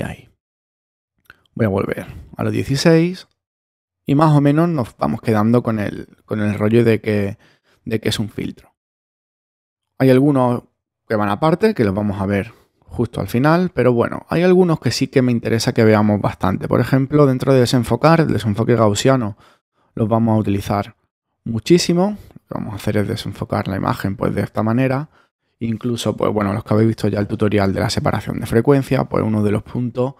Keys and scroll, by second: 1.7 alt+super+z.